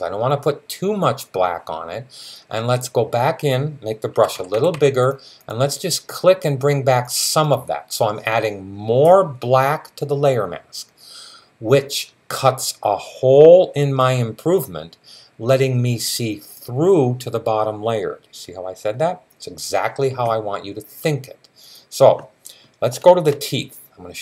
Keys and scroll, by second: 4.0-4.6 typing.